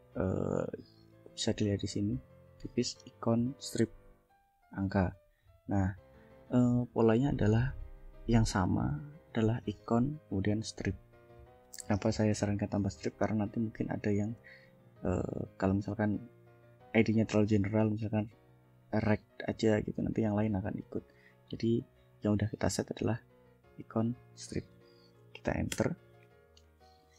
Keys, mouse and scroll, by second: 5.5 click, 7.5-8.9 drag, 10.5 click, 15.1-16.1 drag, 19.8 click, 20.4 click, 24.1 click, 25.8 Return.